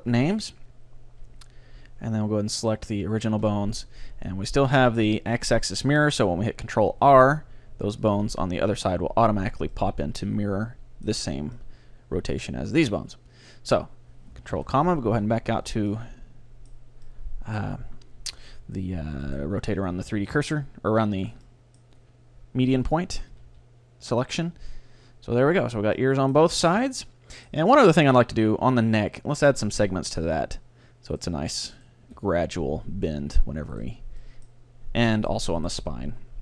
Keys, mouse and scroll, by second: 0.0 click, 2.7-5.1 right drag, 7.2 ctrl+r, 8.3-10.2 drag, 9.8-11.6 middle drag, 11.6-13.4 middle drag, 14.6 ctrl+,, 15.2 Tab, 15.7 a, 16.0 middle click, 18.4 middle click, 19.4-21.1 right drag, 20.1 r, 21.5-24.7 middle drag, 21.5-23.1 right drag, 23.4 r, 26.0 middle click, 28.2 middle click, 28.2-30.0 right drag, 29.6-31.2 drag, 32.1-33.6 right drag, 32.2 r, 33.9-36.4 right drag, 34.3-36.1 middle drag.